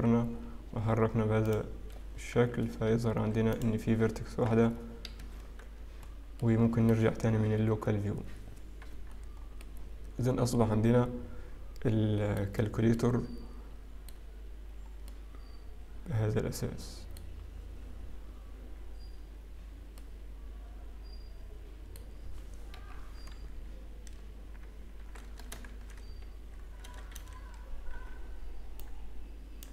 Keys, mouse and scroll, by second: 1.1 g, 1.5 click, 2.8 g, 4.2 click, 4.5 g, 6.0 Tab, 6.0 scroll down 3, 6.9 middle click, 6.9-7.9 scroll down 1, 9.0-10.1 scroll down 1, 10.1 middle click, 10.1-11.2 scroll down 2, 12.9 middle click, 14.9 scroll down 2, 15.1 middle click, 20.0 middle click, 24.8 Tab, 24.8 scroll up 3, 24.8 KP_3, 25.7 shift+z, 26.8 a, 27.9 b.